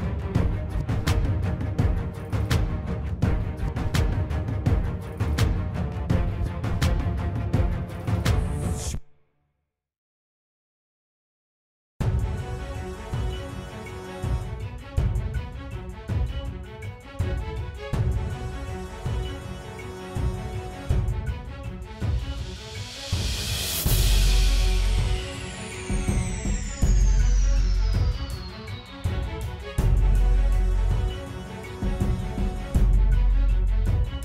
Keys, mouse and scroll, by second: 7.9 middle click, 8.5 middle click, 8.7 middle click, 9.2 middle click, 11.1 middle click, 11.3 middle click, 11.5 middle click, 12.3 middle click, 12.9 middle click, 14.6 middle click, 15.3 middle click, 15.8 middle click, 16.3 middle click, 16.6 middle click, 16.9 middle click, 17.3 middle click, 33.6 middle click.